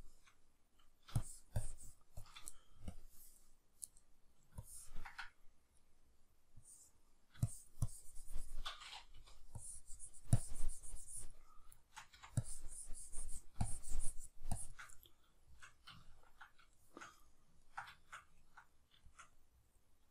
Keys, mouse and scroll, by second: 5.8 middle click, 6.6-11.7 drag, 9.1 p, 11.7 shift+middle click, 12.1 c, 12.4-14.9 drag, 14.9-16.4 middle drag, 16.7-20.1 shift+middle drag.